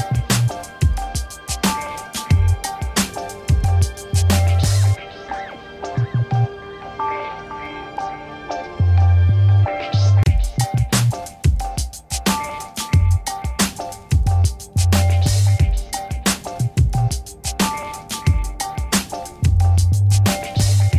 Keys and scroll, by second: 0.2 5, 16.2 v.